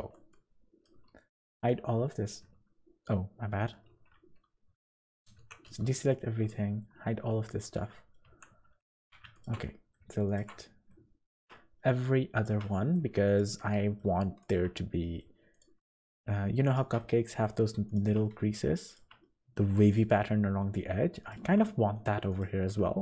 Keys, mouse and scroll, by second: 0.0 b, 1.1 h, 1.4 z, 3.9 alt+h, 4.7 z, 5.3 alt+a, 5.6 b, 6.8 h, 7.4 z, 7.8 middle click, 8.2 2, 9.0 alt+a, 9.3 alt+shift+click, 9.6 middle click, 10.2 alt+shift+click, 10.6 middle click, 11.2 alt+shift+click, 11.5 middle click, 12.6 middle click, 13.2 alt+shift+click, 13.6 middle click, 14.4 alt+shift+click, 14.7 middle click, 15.5 alt+shift+click, 15.8 middle click, 16.6 alt+shift+click, 17.0 middle click, 17.8 alt+shift+click, 18.2 middle click, 18.8 alt+shift+click, 19.2 middle click, 19.8 alt+shift+click, 20.2 middle click, 21.2 alt+shift+click, 21.6 middle click, 22.3 alt+shift+click, 22.6 middle click.